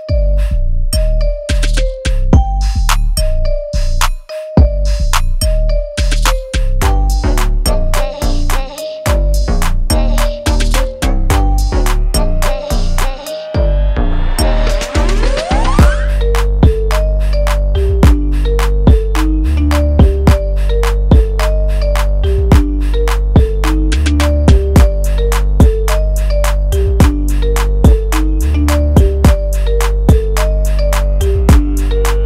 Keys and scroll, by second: 18.8 ctrl+z, 26.1 l, 28.3 ctrl+z, 28.9 ctrl+alt+z.